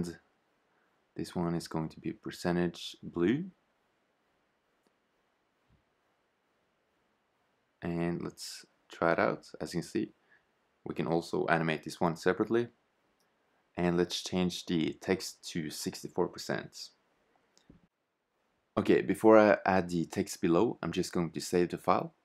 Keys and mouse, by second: 0.9-1.8 typing, 7.8 click, 12.3 shift+z, 12.4 Tab, 13.3 BackSpace, 13.5 BackSpace, 14.9 6, 15.0 4, 16.2 Tab, 17.2 shift+z, 19.9 shift+z.